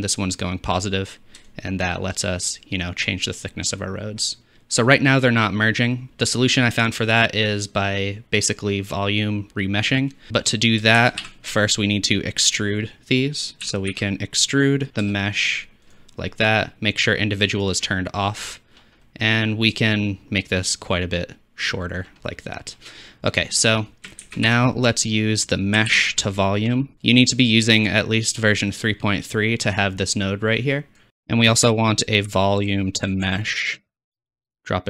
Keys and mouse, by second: 11.0 shift+a, 13.9-15.9 drag, 17.7 click, 18.7 middle click, 20.0-21.7 shift+drag, 24.3 shift+a, 26.9 click, 28.0-31.0 drag, 31.1 shift+a, 31.1 BackSpace, 31.7 shift+a, 33.7-34.8 drag, 33.7 middle click, 33.7 right click.